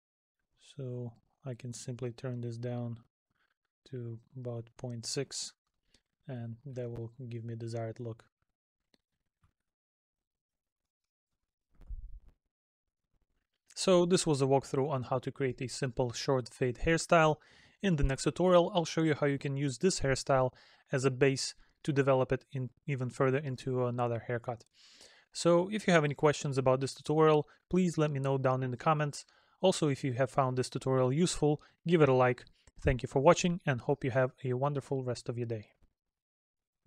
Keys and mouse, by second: 4.2 middle click, 5.7 middle click, 11.0 middle click.